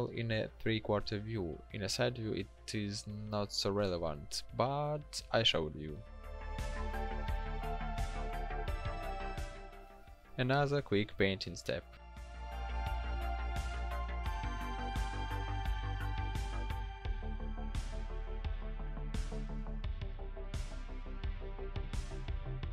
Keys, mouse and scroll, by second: 11.2 ctrl+shift+n.